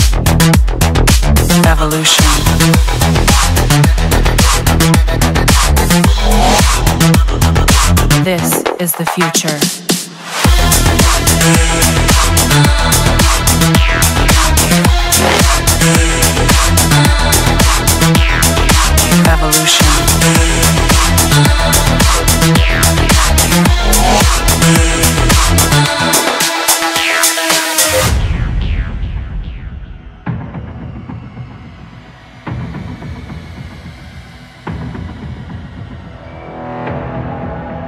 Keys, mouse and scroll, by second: 1.5 click, 3.3 Escape, 4.2-5.0 middle drag, 5.0-5.4 scroll, 6.1 middle click, 7.1 middle click, 8.5-9.5 drag, 12.4-13.5 drag, 14.0-15.1 drag, 16.8 click, 18.7-19.9 typing, 20.8 Return, 25.4-26.5 drag, 28.2 click, 30.8-31.8 typing, 32.2 Return, 35.2 Escape, 36.3 Return, 36.3 typing, 37.3 Escape.